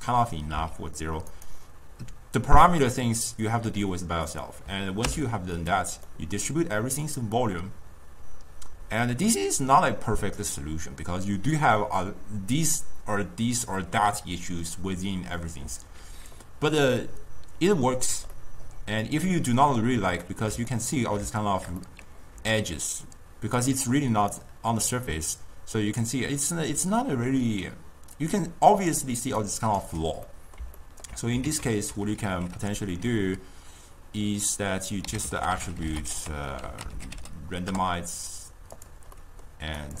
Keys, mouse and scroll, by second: 0.7 s, 2.8 click, 4.4 click, 5.2 m, 5.7 click, 6.2-9.2 middle drag, 15.9-17.0 drag, 17.0-22.5 middle drag, 22.5-29.9 typing, 23.1 click, 24.0 right click, 29.0 click, 29.5 right click, 30.4-31.6 middle drag, 31.6 ctrl+a, 35.5 t, 39.3-39.9 middle drag, 39.9-40.0 drag.